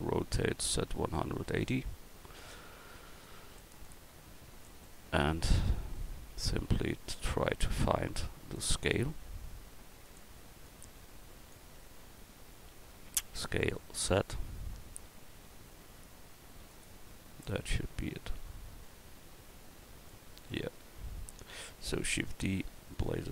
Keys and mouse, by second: 0.5 r, 8.9 click, 8.9 s, 10.6-11.9 drag, 13.4 s, 20.5 middle click, 22.0 shift+d.